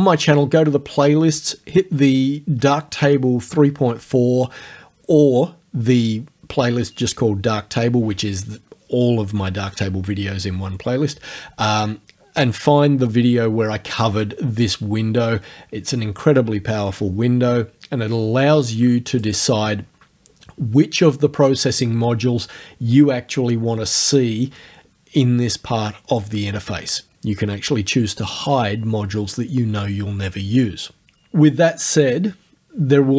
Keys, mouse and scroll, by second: 18.5 click.